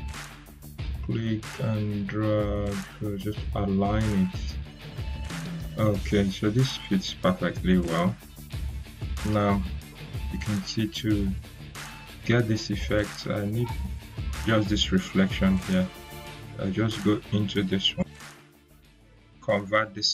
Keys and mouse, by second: 11.8 click, 15.6 click, 19.7 right click.